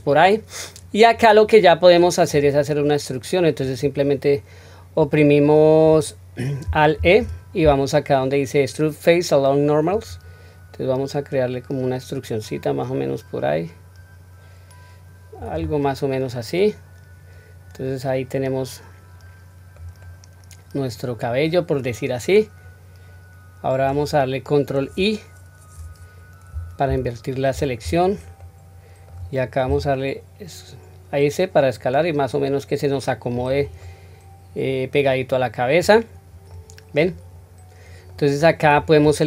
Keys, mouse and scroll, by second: 1.4-1.9 scroll down 1, 1.9 middle click, 2.7-3.7 middle drag, 6.9 alt+e, 15.8-19.8 middle drag, 20.0-23.8 middle drag, 26.8 ctrl+i, 28.3 middle click, 29.6 s, 33.8-35.8 middle drag, 36.0-36.4 scroll down 1, 36.4 middle click, 37.3 scroll up 1, 38.0 middle click, 38.0 scroll up 1.